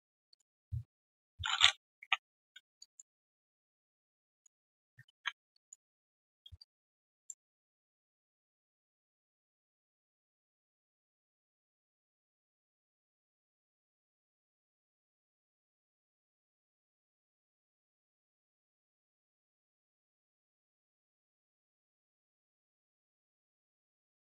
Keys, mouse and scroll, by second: 2.7 alt+click, 3.1 alt+middle click, 3.4 alt+right click, 3.6 alt+click, 4.0 alt+middle click, 4.3 alt+click, 4.5 alt+middle click, 5.1 ctrl+z, 5.5 alt+click, 6.1 alt+right click, 6.5 right click, 6.5 q, 7.9 ctrl+shift+right click, 12.0-12.5 typing, 13.0 alt+q, 13.0 click, 13.3 alt+middle click, 13.6 alt+right click, 15.5 ctrl+shift+q, 20.4 alt+click.